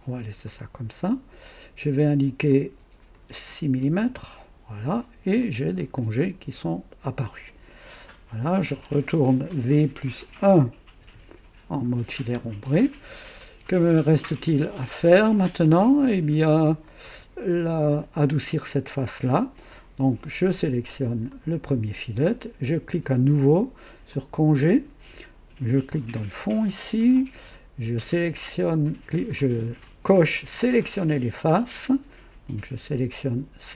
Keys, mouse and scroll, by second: 0.4 right click, 0.5 click, 1.3 right click, 2.5 click, 3.8 KP_6, 4.0 KP_Enter, 5.3 right click, 5.9-7.6 drag, 10.9 v, 11.0 KP_1, 12.5-16.8 drag, 16.8 right click, 21.2 click, 24.0 click, 25.8 click, 30.5 click.